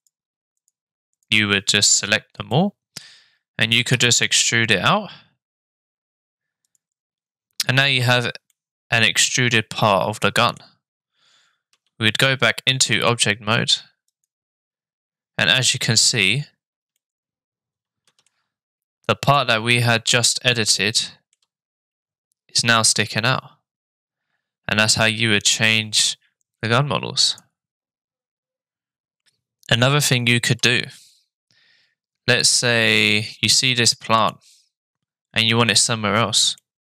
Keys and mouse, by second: 1.2 shift+click, 2.5 middle click, 4.3 e, 8.6-10.6 middle drag, 12.4 Tab, 14.1 click, 14.1 middle click, 17.0-18.3 middle drag, 20.2-21.4 shift+middle drag, 25.0-26.2 shift+middle drag, 27.3 click, 32.4 click, 33.2 middle click, 36.6-36.8 drag.